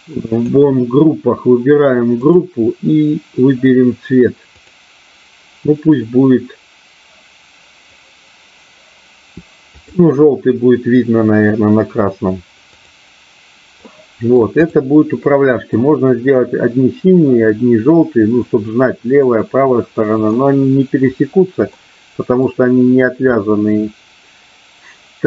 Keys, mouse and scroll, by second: 0.2 click, 2.2 click, 4.5-10.0 drag, 12.6 click, 13.9 middle click, 14.6 click, 15.1 middle click, 19.2-20.2 middle drag, 21.7 middle click, 23.4-25.2 middle drag.